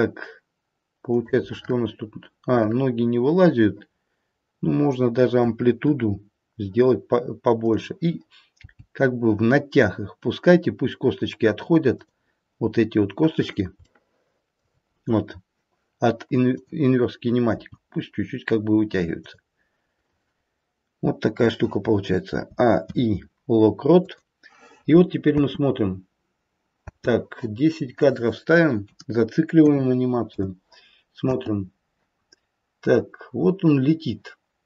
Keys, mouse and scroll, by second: 1.3 middle click, 2.4 middle click, 5.4 middle click, 5.8 KP_1, 7.5 click, 8.6 g, 12.7-13.7 scroll up 2, 13.7 scroll up 2, 13.9 shift+middle click, 16.5 click, 17.6 g, 22.3 a, 22.7 i, 25.3 space, 25.8-26.9 scroll down 4, 26.9 space, 27.9 click, 31.2 space, 32.1-32.9 scroll up 1, 32.9 scroll down 1, 33.1-33.6 scroll down 1.